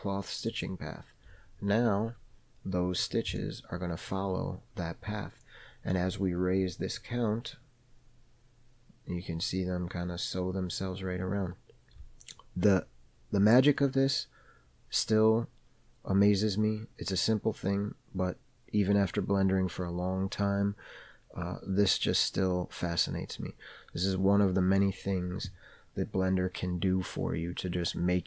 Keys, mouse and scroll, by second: 3.6-4.3 middle drag, 5.4 scroll up 1, 7.2-28.2 drag.